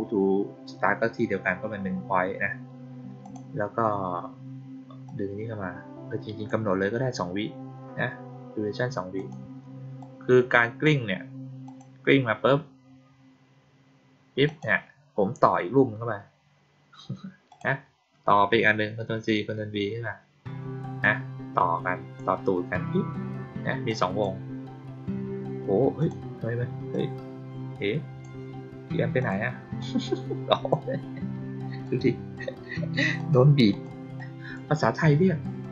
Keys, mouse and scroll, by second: 3.1 click, 5.0-6.4 drag, 9.1 click, 9.9-10.8 drag, 11.6 click, 14.4 click, 17.4 click, 20.9-22.1 drag, 23.8-24.1 drag, 25.9 click, 26.8-28.1 drag, 29.1 click, 29.7-30.6 drag, 31.8-32.3 drag, 33.1 click, 33.6 click, 34.1-34.5 drag, 35.5 click.